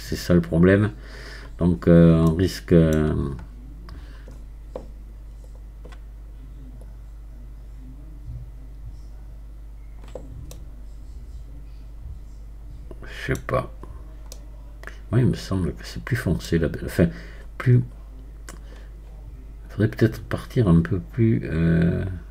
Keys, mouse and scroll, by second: 1.8-2.3 scroll up 5, 2.3 middle click, 3.3-4.3 scroll up 3, 4.3-5.5 scroll up 4, 5.5-8.5 drag, 10.5-13.5 middle drag, 13.8-14.3 scroll up 2, 14.3-16.5 middle drag, 16.5-17.7 scroll down 1, 17.7-18.4 scroll up 1, 18.4-19.7 scroll up 1, 19.7-22.3 drag.